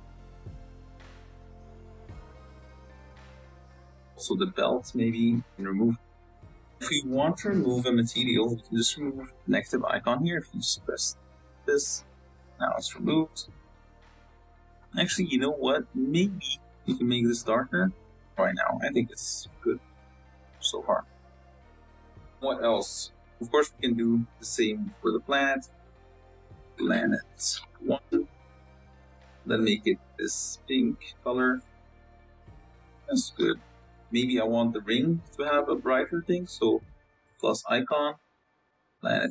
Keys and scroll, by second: 0.5 l, 2.8 Tab, 31.3 z, 33.2 z, 34.8 z, 35.5 Tab, 35.8 a, 36.6 l.